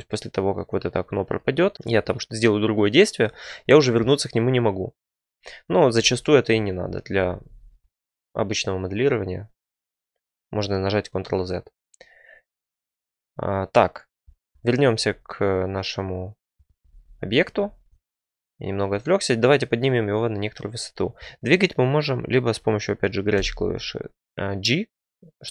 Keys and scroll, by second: 5.9 ctrl+z, 6.4 ctrl+z, 14.9 2, 16.8 ctrl+z, 17.1 ctrl+z, 24.2 g.